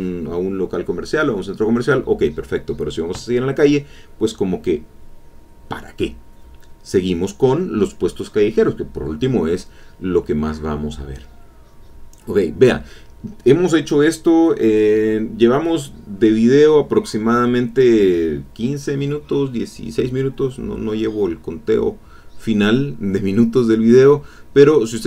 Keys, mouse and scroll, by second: 1.8 ctrl+click, 2.3 ctrl+click, 5.2 click, 5.9 click, 6.4 ctrl+z, 7.2 ctrl+click, 7.9-9.7 drag, 12.7-13.9 middle drag, 15.5 click, 16.8-17.8 drag, 22.5 click, 23.4-24.7 drag.